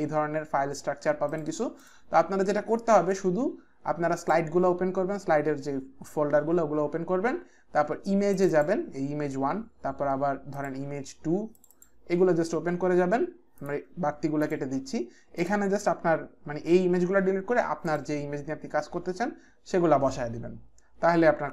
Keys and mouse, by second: 1.2 click, 4.2 click, 8.4 click, 10.5 click, 11.6 click, 11.7 click, 13.6 click, 14.4 click, 15.4 click, 17.9 click.